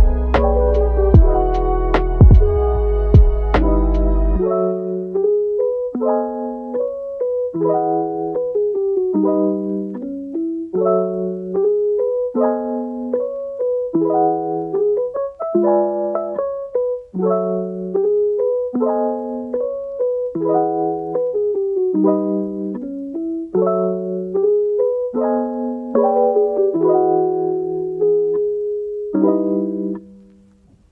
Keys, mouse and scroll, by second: 0.4 r, 2.4 shift+d, 3.7 r, 5.2 r, 5.9 g, 6.4-7.1 middle drag, 7.1 g, 7.9 scroll down 2, 8.2-9.8 middle drag, 9.8 KP_1, 10.2-10.6 scroll up 1, 10.6 Tab, 11.3 click, 12.0 g, 13.1 click, 13.4 g, 14.2 click, 14.5 g, 15.3 click, 15.6 g, 16.1 click, 17.1 g, 18.4 click, 18.7 g, 19.5-21.8 middle drag, 21.8 KP_3, 22.3 click, 23.0 g, 24.8 click, 25.2 g, 26.3 click, 26.7 g, 27.2-27.8 middle drag, 27.8 g, 28.5-29.8 middle drag, 29.8 Tab, 30.1 click, 30.4-30.9 middle drag.